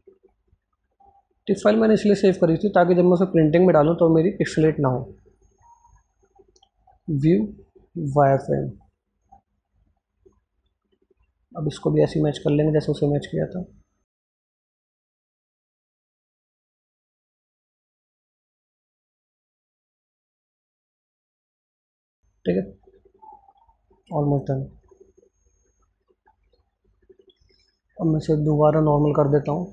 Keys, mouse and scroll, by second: 2.8 click, 4.0 click, 12.6 click, 14.3 click, 15.4 click, 16.4 scroll up 1, 18.3 click, 19.5 click, 20.6-22.3 drag, 22.7-24.1 scroll down 1.